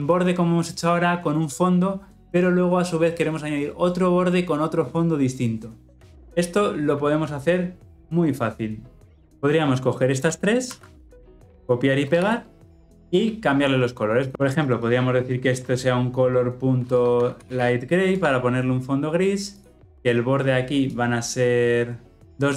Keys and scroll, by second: 9.0 ctrl+alt+o, 10.6 ctrl+c, 12.1 ctrl+v, 14.3 ctrl+z, 18.1 Return.